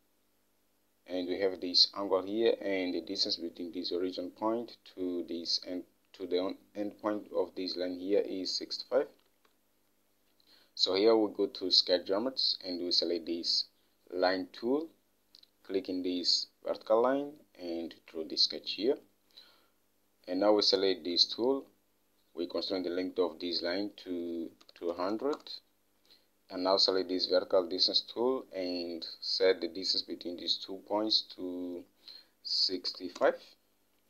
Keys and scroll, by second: 9.7 alt+Tab, 24.8-26.0 typing, 32.9-33.8 typing.